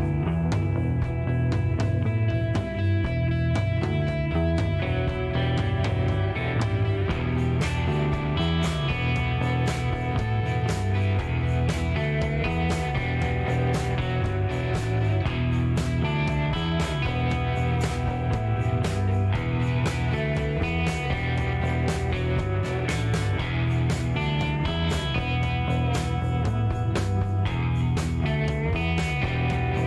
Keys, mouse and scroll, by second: 0.2 middle click, 0.9 shift+right click, 2.7 shift+right click, 4.7 middle click, 5.2 shift+right click, 6.5 shift+scroll up 1, 7.0 middle click, 8.6 click, 9.1 shift+right click, 10.0 shift+middle click, 11.0 middle click, 11.7 middle click, 11.7 scroll up 1, 12.5 scroll up 1, 12.7 middle click, 13.5 shift+right click, 14.6 middle click, 14.8 scroll up 1, 15.3 middle click, 15.8 scroll down 1, 16.4 shift+right click, 18.4 shift+middle click, 18.8 shift+scroll up 1, 19.7 shift+right click, 22.9 ctrl+click, 26.1 click.